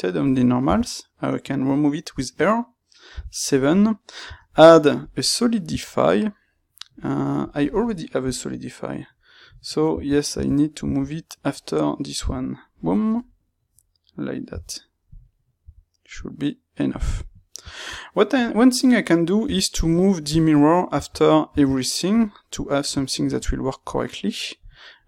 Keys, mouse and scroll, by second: 3.5 middle click, 17.2 middle click, 22.3 middle click, 24.3-25.0 middle drag.